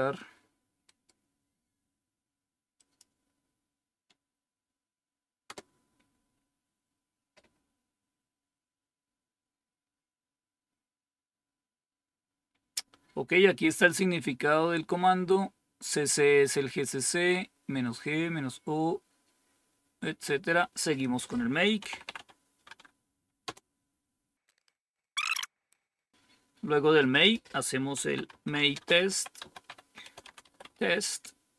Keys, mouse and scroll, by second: 2.7 click, 5.4 Return, 17.6 scroll down 1, 18.2-18.9 scroll down 1, 18.9-20.0 scroll down 1, 20.0-20.9 scroll down 1, 20.9 click, 21.5-22.6 typing, 23.4 Return, 25.0-25.5 scroll up 1, 25.5-26.0 scroll down 1, 27.1 click, 27.5 click, 27.6-31.0 typing.